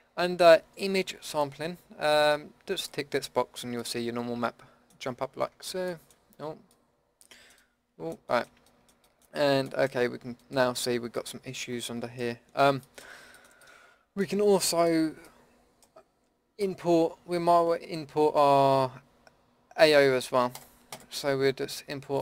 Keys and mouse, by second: 1.3-4.7 middle drag, 4.7 middle click, 9.4 middle click, 10.5 middle drag, 12.1 middle drag, 14.7-19.8 middle drag, 19.8-22.2 drag.